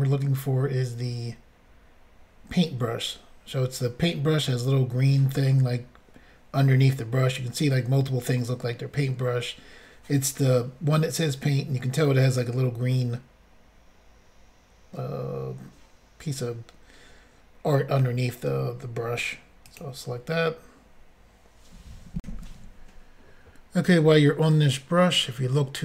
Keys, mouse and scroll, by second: 19.7 click, 19.8 click, 22.2 Insert.